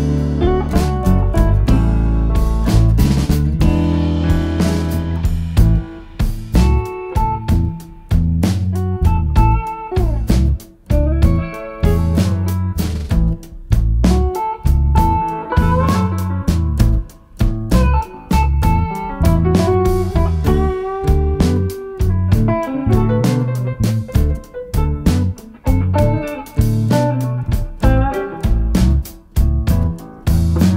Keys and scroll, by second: 0.4 ctrl+d, 0.9 ctrl+*, 1.6 Page_Down, 2.2 End, 2.5 Page_Up, 3.5 -, 10.9 F1, 24.0 -, 28.3 F1, 29.3 space, 30.2 shift+F6.